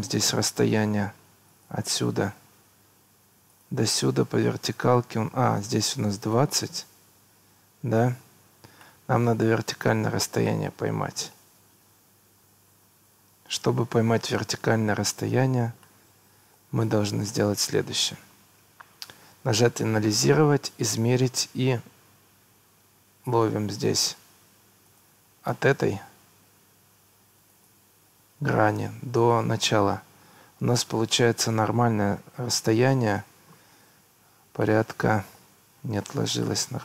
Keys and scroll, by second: 7.8 Escape, 14.8 Escape, 24.1 Escape.